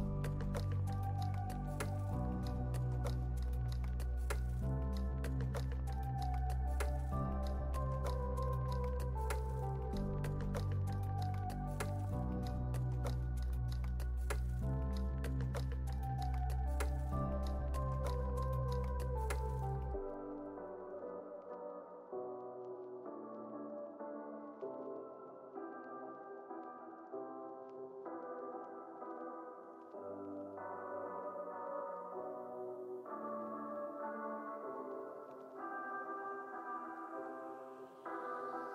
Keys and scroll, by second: 20.0 super+s, 27.4 super+s, 28.0 space, 35.1 space, 37.4 u.